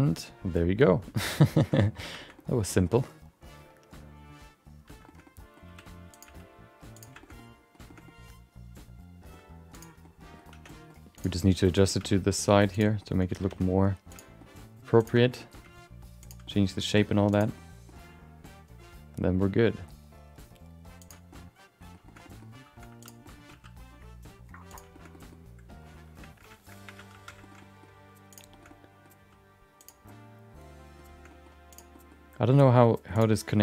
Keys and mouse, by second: 0.0 middle click, 1.1 middle click, 1.2 middle click, 1.6 middle click, 1.8 middle click, 2.1 middle click, 2.3 middle click, 2.8 shift+middle click, 3.0-4.8 middle drag, 5.0 shift+middle click, 5.2 middle click, 5.6 r, 7.2 shift+middle click, 7.2 g, 7.3 middle click, 7.9 shift+middle click, 8.0-9.3 middle drag, 10.0 middle click, 10.0 g, 10.5 Tab, 10.6 middle click, 11.1 click, 11.4 middle click, 12.0 g, 13.0 middle click, 13.5 r, 14.3 middle click, 15.0 click, 15.2 shift+middle click, 15.3 middle click, 15.6 g, 16.4 middle click, 16.9 r, 17.5 middle click, 18.4 g, 21.3 middle click, 22.0 shift+middle click, 22.2 middle click, 22.9 2, 23.0 click, 23.2 middle click, 23.5 g, 24.9 shift+middle click, 25.1 middle click, 26.8 1, 27.1 shift+2, 27.4 shift+middle click, 27.6 middle click, 28.3 click, 28.5 shift+middle click, 28.6 middle click, 29.1 g, 30.0 middle click, 31.3 middle click, 31.7 click, 31.9 middle click, 33.1 click.